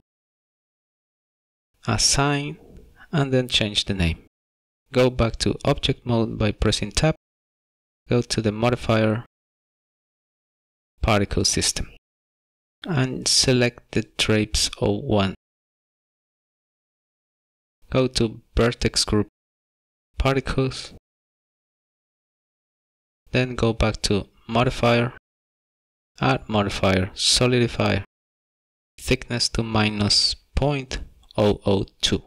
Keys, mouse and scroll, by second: 1.7 click, 2.9 click, 3.0 click, 4.8 click, 4.9 Tab, 6.1 shift+middle click, 7.6-8.5 scroll down 4, 8.6 shift+middle click, 9.5 click, 9.8 click, 10.2 click, 15.0 click, 20.0 click, 20.1 click, 24.9 click, 26.6 click, 30.4 click, 32.1 KP_0.